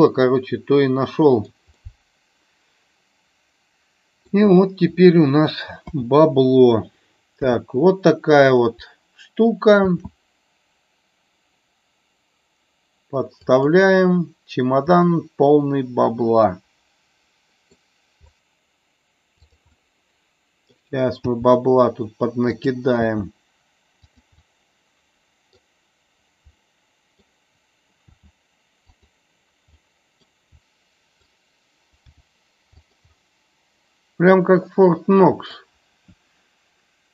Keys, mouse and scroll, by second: 1.7-4.2 middle drag, 5.8 KP_5, 7.3 KP_7, 9.8 shift+d, 13.6 click, 15.0-17.7 middle drag, 18.3 shift+d, 19.4 click, 19.6-20.6 middle drag, 22.5 click, 24.3-25.4 middle drag, 26.5-27.1 middle drag, 28.8 click, 29.6-30.3 middle drag, 30.5 r, 30.6 middle click, 32.1 g, 32.7 click, 33.1-34.7 middle drag, 34.8 middle click.